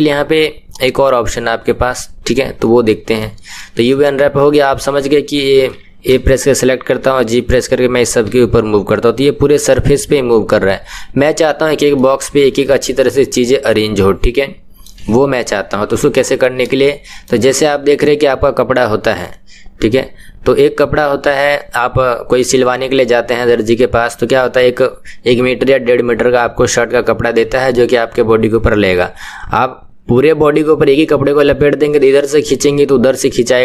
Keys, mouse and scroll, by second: 2.9 KP_1, 3.9-6.1 shift+middle drag, 6.1 a, 7.2 g, 11.9-14.9 middle drag, 16.1 KP_1, 17.1-33.6 shift+middle drag.